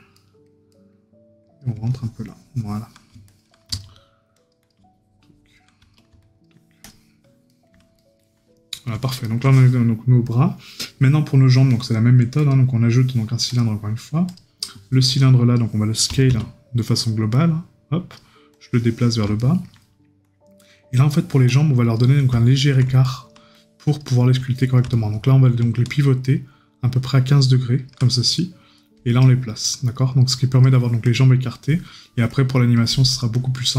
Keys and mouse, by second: 7.5 right click, 19.4 right click, 22.6 right click, 24.6 right click.